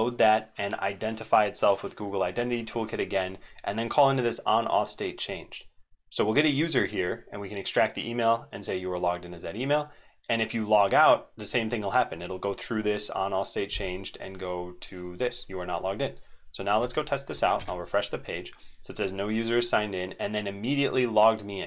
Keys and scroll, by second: 17.0 super+1, 17.5 ctrl+r.